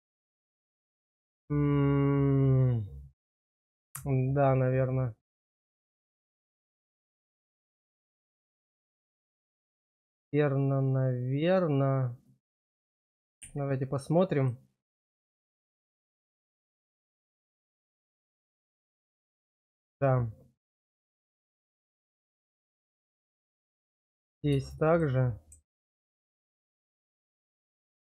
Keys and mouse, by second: 15.4-18.1 middle drag, 18.6 shift+middle click, 19.6 shift+middle click, 22.6 shift+middle click, 23.4 middle click.